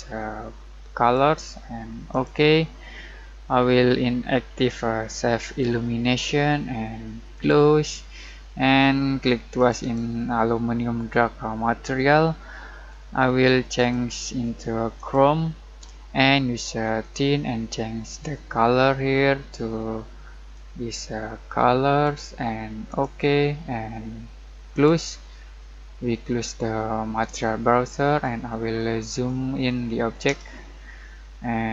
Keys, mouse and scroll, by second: 5.4 click, 13.7 click, 20.5-26.9 drag, 27.2 click, 28.2 middle click, 28.7-29.2 scroll up 1, 29.2 middle click, 30.4-31.7 shift+middle drag.